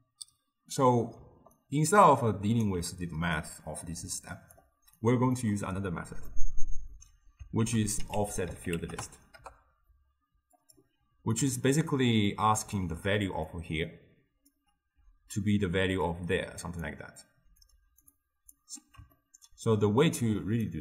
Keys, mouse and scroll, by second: 1.2 d, 1.6-2.7 right drag, 2.7 d, 3.5 click, 5.5-7.7 middle drag, 7.7 ctrl+a, 8.4 f, 11.0 d, 11.4-12.9 right drag, 12.9 d, 13.2 d, 13.6-14.6 drag, 14.6-18.7 typing, 16.1 click, 17.7-18.1 drag, 18.2-18.6 drag, 19.2-20.7 ctrl+middle drag, 20.7 click.